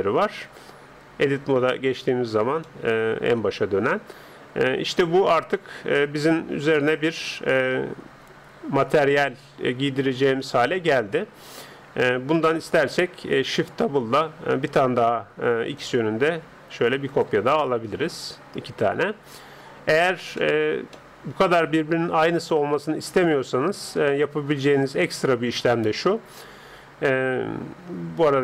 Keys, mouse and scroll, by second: 0.0-1.1 scroll up 1, 1.1 Tab, 2.1 Tab, 2.7 middle click, 4.9-6.5 drag, 5.7-7.3 middle drag, 10.3-11.9 middle drag, 12.9-14.5 middle drag, 14.1 shift+d, 17.5-22.7 middle drag, 23.2-24.9 middle drag.